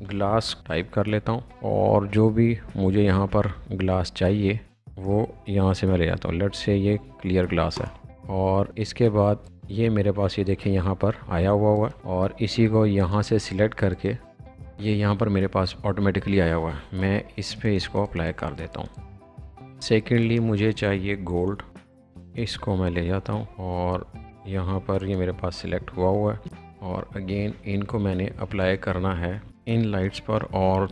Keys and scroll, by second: 0.0-0.9 typing, 17.0 space, 19.0 b, 19.1 space, 19.6 Escape, 21.2-22.2 typing, 28.7 space, 29.8-30.9 typing, 30.7 Escape.